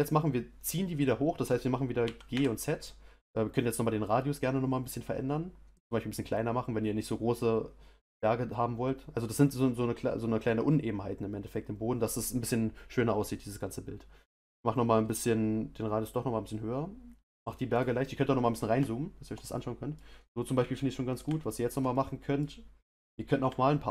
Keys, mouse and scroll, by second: 2.0 g, 17.7 click, 18.1-18.5 scroll up 3, 18.8-20.1 shift+middle drag, 20.1-20.5 scroll up 1, 20.5-23.9 middle drag.